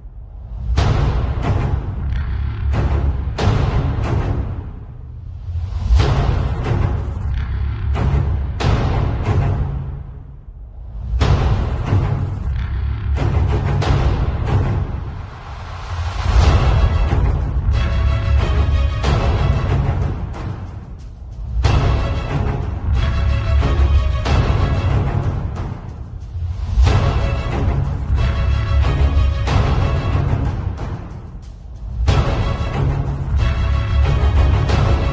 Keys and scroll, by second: 1.9 alt+shift+s, 2.3 alt+shift+super+t, 10.0 alt+shift+s, 10.3 alt+shift+super+t, 13.2 Return, 13.6 alt+shift+s, 13.9 alt+shift+super+t, 14.2 alt+shift+super+t, 17.2 Return, 17.5 alt+shift+s, 17.8 alt+shift+super+t, 18.2 alt+shift+super+t, 19.2 alt+shift+Return, 20.9 z, 21.3 space, 22.1 v, 23.0 shift+super+g, 24.0-26.1 typing, 31.1-34.2 typing, 34.3 Return.